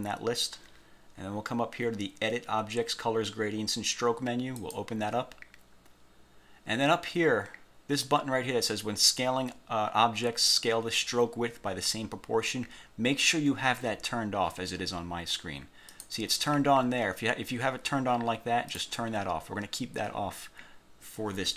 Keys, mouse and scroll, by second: 4.7 click, 16.0 click, 18.8 click.